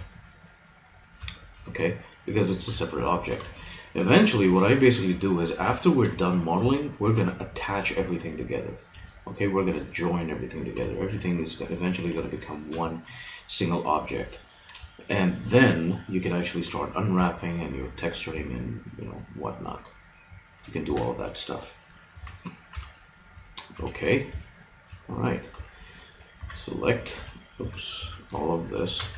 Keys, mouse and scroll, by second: 1.4 middle click, 7.0 g, 8.4-13.2 drag, 17.2 g, 20.4 click, 20.8 a, 22.2 a, 22.8 KP_Decimal, 23.7 a, 25.6 KP_1, 26.4 Tab, 27.6 Tab, 28.0 a.